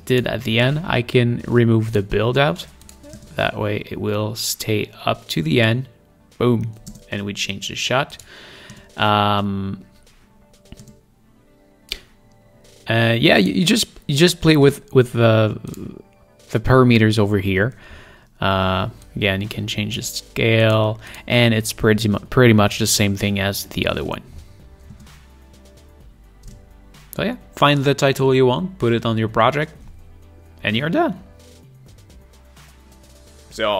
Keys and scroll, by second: 3.5 space, 7.2 space, 25.3 space, 26.9 space.